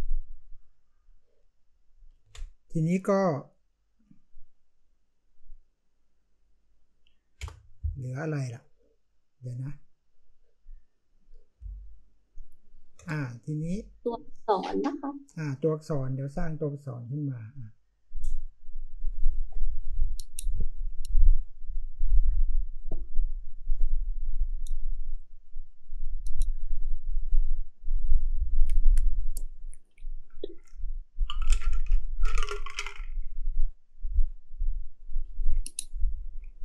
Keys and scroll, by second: 2.1 ctrl+t, 7.3 Return, 11.5 space, 13.7-15.2 space.